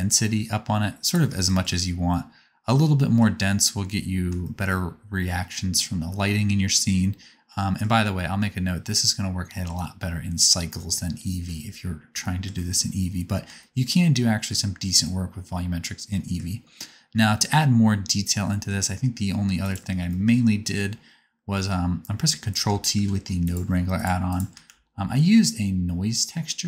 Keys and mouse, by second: 12.5-15.2 middle drag, 22.5 ctrl+t, 22.9 g, 23.9 click, 23.9 right click, 24.2 click, 24.2 right click, 24.6 shift+s.